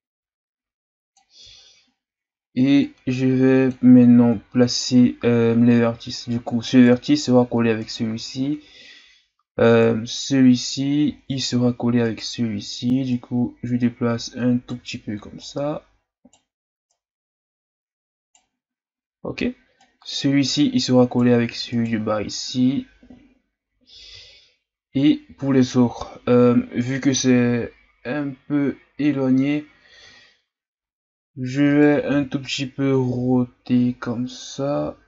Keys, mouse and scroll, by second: 1.5-2.2 ctrl+scroll up 4, 2.8-4.0 drag, 4.0-6.6 scroll up 6, 6.6 right click, 7.8 right click, 9.7 right click, 11.1-12.0 scroll down 2, 12.0 right click, 13.1-14.3 right drag, 15.4 right click, 16.9 right click, 18.9-19.6 scroll up 1, 19.8 right click, 21.7 right click, 23.8-24.2 scroll down 2, 24.2-24.9 ctrl+scroll up 3, 30.6-31.7 scroll up 1, 31.7 right click, 32.1 l, 33.1 r.